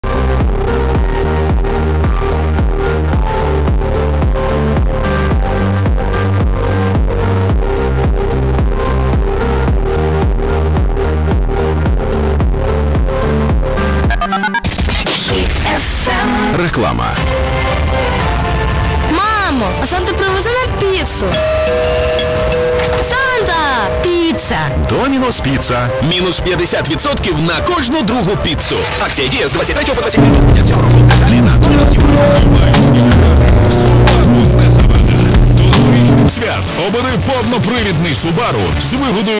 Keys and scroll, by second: 0.1 ctrl+c, 2.1 typing, 2.4-5.3 Down, 4.4 typing, 5.7 Down, 5.9 Down, 7.1 e, 22.7 Page_Down, 36.3 Page_Down, 39.3 alt+s.